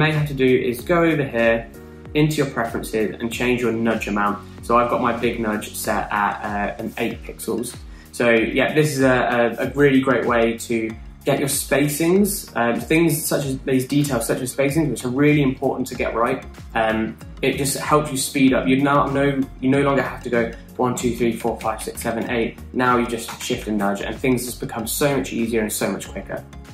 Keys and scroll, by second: 21.1 Down, 21.3 Down, 21.5 Down, 21.7 Down, 21.9 Down, 22.1 Down, 22.6 Up, 23.9 shift+Down, 24.1 shift+Down.